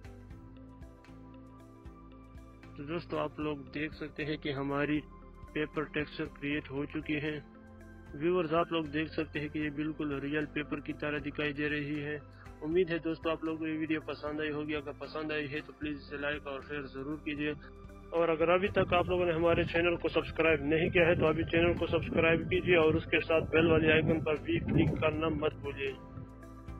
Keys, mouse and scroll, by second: 2.1 click, 4.4 Right, 4.8 Down, 6.0 click, 9.8 click, 9.9 ctrl+=, 11.9 ctrl+-, 16.6 click, 24.1 click.